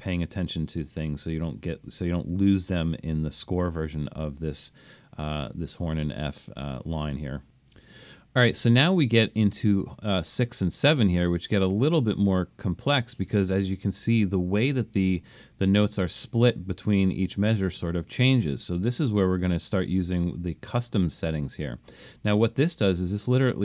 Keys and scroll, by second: 11.6 Escape.